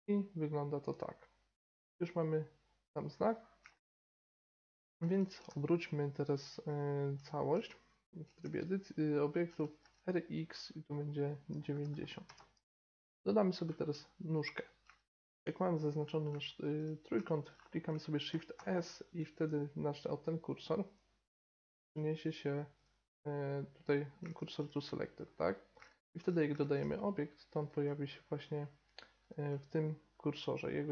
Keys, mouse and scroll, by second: 2.2-5.0 middle drag, 5.0 r, 7.6 Tab, 9.4 r, 13.2-17.2 middle drag, 17.2-18.5 drag, 18.5-19.5 shift+middle drag, 20.4-22.0 shift+right drag, 20.8-22.0 shift+drag, 22.4-23.1 shift+drag, 25.2-27.4 shift+middle drag.